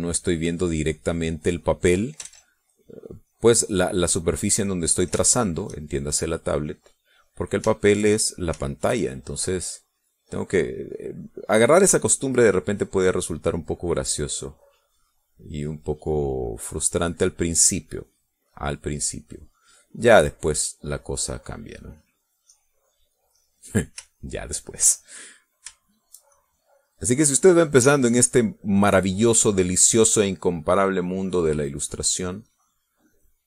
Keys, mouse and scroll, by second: 3.3 ctrl+z, 3.8-6.9 ctrl+drag, 7.3-9.2 drag, 9.3 shift+click, 10.5 click, 10.9-12.0 drag, 12.1-24.3 drag, 24.7-26.3 middle drag, 26.3 shift+click, 27.1 shift+click, 27.5 shift+click, 28.7-29.8 drag, 30.8-33.4 drag.